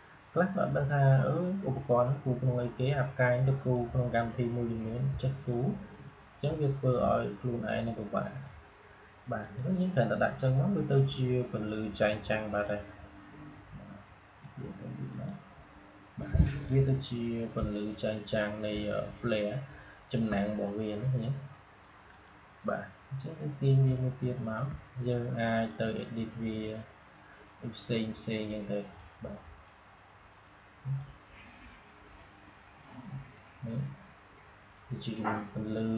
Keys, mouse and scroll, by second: 5.1-9.3 shift+drag, 11.9-18.8 drag, 18.8-22.0 shift+drag, 23.9-35.9 alt+shift+drag.